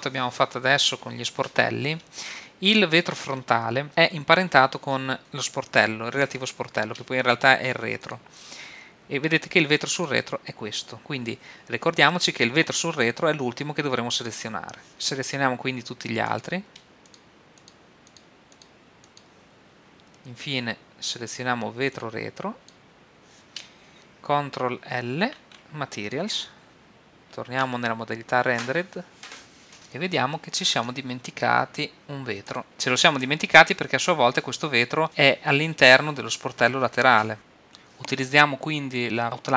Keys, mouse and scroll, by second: 5.4-7.0 right drag, 8.1-11.0 drag, 16.3-21.0 drag, 22.6-24.3 drag, 25.5 ctrl+l, 28.3 shift+z, 29.8-32.6 middle drag, 32.6-36.2 right drag.